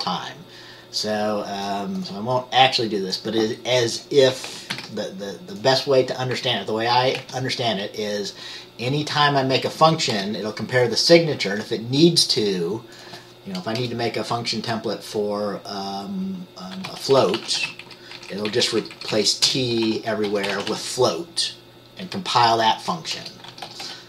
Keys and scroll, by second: 4.8 ctrl+c, 7.3 ctrl+v, 10.2 Return, 13.9 BackSpace, 16.9-17.7 typing, 17.9 Right, 18.3 Right, 18.4 Right, 18.6 Right, 19.6-20.8 typing, 23.3-24.0 typing.